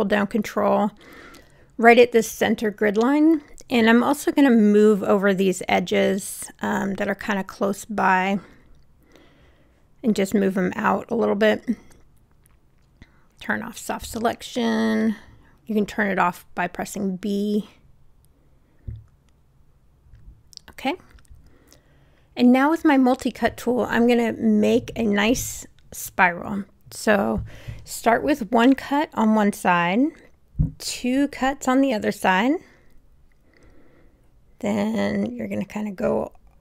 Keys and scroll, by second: 14.6 w, 27.6 Return, 31.0 Return.